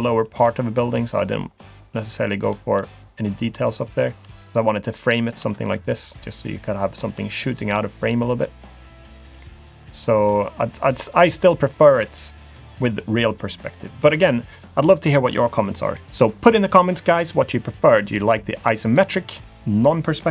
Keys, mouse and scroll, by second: 0.0 middle click, 0.9-1.4 scroll up 2, 1.6 shift+middle click, 2.9 middle click, 3.9 shift+middle click, 4.8 shift+middle click, 5.8 middle click, 6.7 shift+middle click, 8.3 middle click, 9.1-9.5 scroll up 1, 9.5-9.8 scroll down 1, 9.9 middle click, 10.3 click.